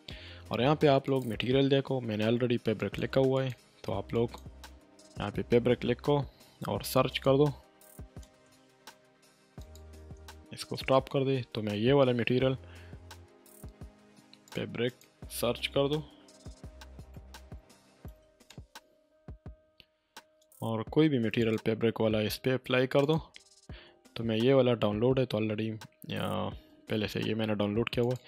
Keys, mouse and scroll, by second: 1.0 click, 7.1 click, 8.2 space, 9.6 click, 9.9 space, 14.5 click, 15.5-18.1 typing, 18.4 Return, 21.4 click, 28.0 click.